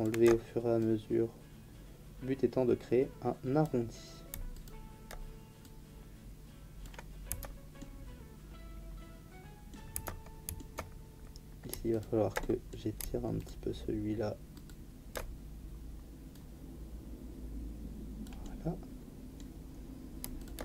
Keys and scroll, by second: 7.3 Tab, 9.9 Tab.